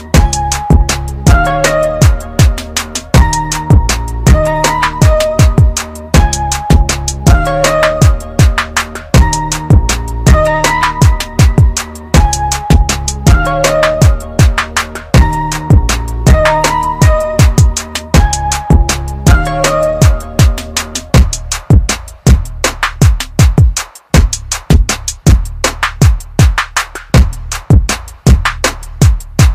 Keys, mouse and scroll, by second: 4.0 space, 6.2 shift+click, 9.3 shift+right click, 12.2 click.